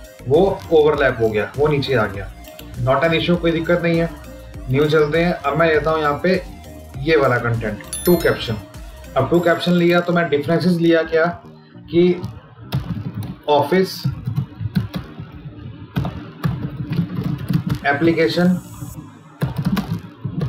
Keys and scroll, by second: 14.4 space, 17.5 space, 19.6 space.